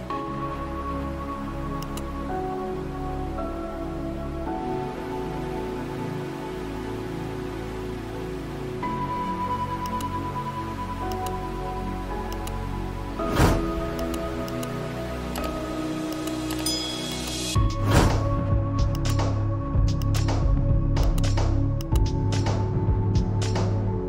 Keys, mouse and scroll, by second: 0.0-0.3 typing, 1.5 Return, 1.9-5.3 typing, 6.7 click, 8.1 Right, 10.7 Right, 14.5 shift+click, 22.0 shift+click.